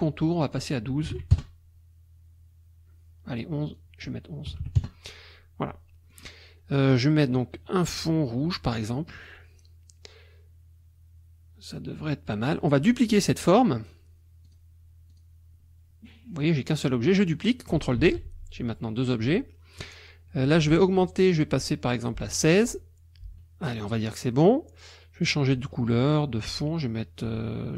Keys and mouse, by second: 0.3 click, 1.1 KP_1, 1.2 KP_2, 1.3 KP_Enter, 3.7 click, 4.5 KP_1, 4.8 KP_Enter, 6.1 click, 6.9 click, 8.8 click, 14.4 click, 15.1 click, 18.0 ctrl+d, 21.0 right click, 22.4 click.